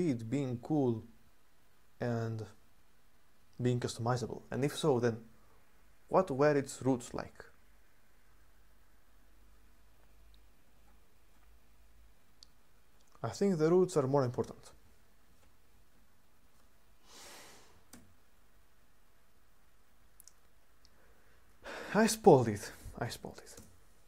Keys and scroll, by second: 17.7 super+1, 22.6-23.0 typing, 23.3 Return.